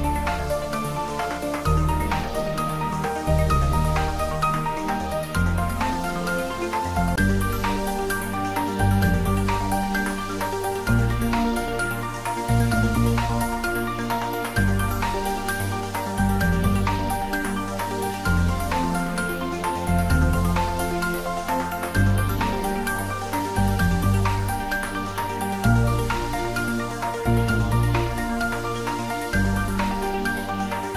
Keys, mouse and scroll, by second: 1.5 click, 4.1 3, 5.5-6.4 typing, 7.7 click, 8.3 s, 8.7 y, 12.2 click, 12.7 s, 13.9 click, 14.2 scroll down 1, 14.7-18.4 middle drag, 20.8 2, 21.9 3, 22.2 click, 25.1 alt+shift+click, 27.8 click, 28.4 alt+click, 30.4 middle click.